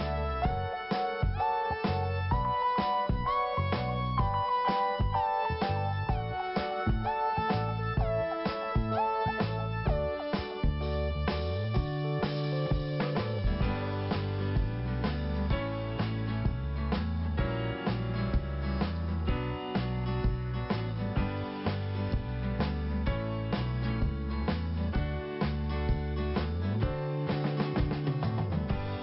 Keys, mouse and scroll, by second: 0.2 click, 4.3 click, 4.4 click, 6.0 click, 8.7 click, 12.0 click, 15.6 click, 15.7 click, 16.3 click, 16.4 click, 20.2 click, 23.7 click, 23.8 click, 24.7 click, 27.4 scroll down 1, 28.1-28.6 scroll down 1, 28.6-29.0 scroll up 2.